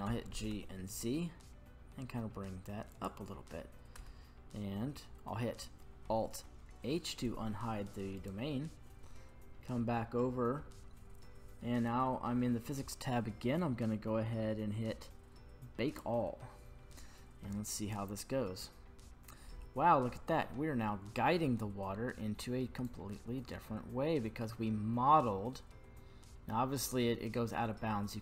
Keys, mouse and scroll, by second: 0.0 g, 0.5 z, 2.9 click, 3.9 Tab, 4.3 scroll down 1, 6.5 alt+h, 8.2 right click, 9.2-11.2 scroll down 7, 11.2-14.6 scroll down 2, 15.9-19.1 drag, 19.8-20.9 middle drag, 22.9-28.2 drag.